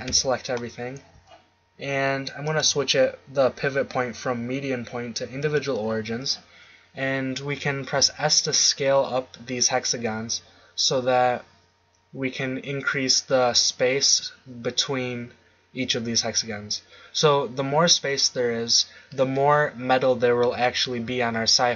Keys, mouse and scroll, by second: 0.1 a, 0.5-1.2 scroll up 1, 1.2-2.4 scroll up 1, 2.4-3.5 drag, 4.0 click, 4.5 middle click, 8.0 s.